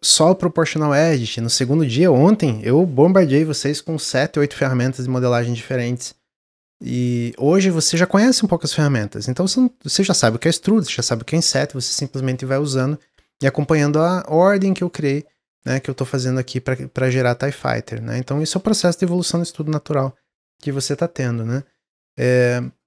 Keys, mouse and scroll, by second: 22.6 middle click.